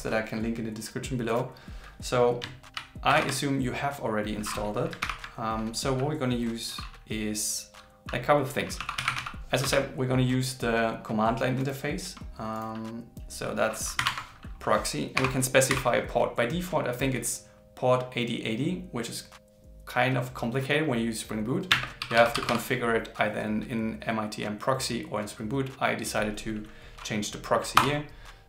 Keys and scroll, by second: 5.0 ctrl+l.